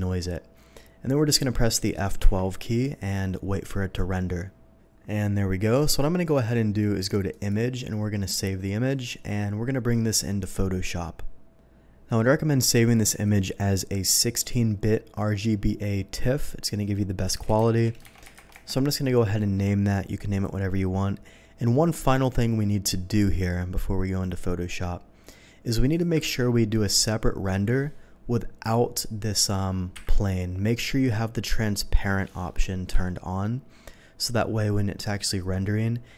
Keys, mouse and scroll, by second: 2.2 F12, 6.3 click, 7.3 click, 12.9 click, 14.4 click, 16.6 click, 17.3-18.3 typing, 18.5 Return, 20.3 click, 25.2 click, 25.9 click, 26.3 ctrl+s, 28.6 click, 29.9 Delete, 30.9 middle click, 31.7 middle click, 32.9 z, 35.5 z.